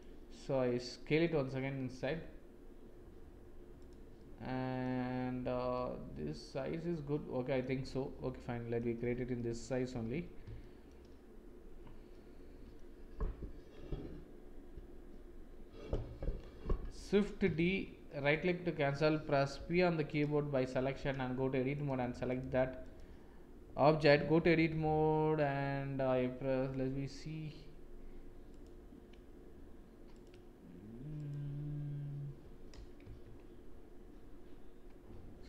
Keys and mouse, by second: 1.1 s, 4.1 click, 5.7-7.5 middle drag, 8.3 middle click, 9.3 middle click, 10.5 shift+middle click, 12.1 middle click, 17.5 shift+d, 19.5 p, 20.9 Tab, 22.7 click, 24.1 Tab, 26.6 n, 33.0 Tab.